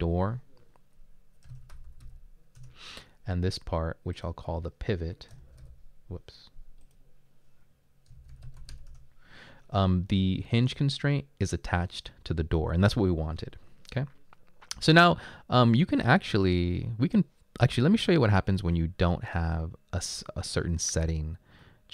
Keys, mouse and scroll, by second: 1.3-2.5 typing, 2.6 Return, 7.9-9.2 typing.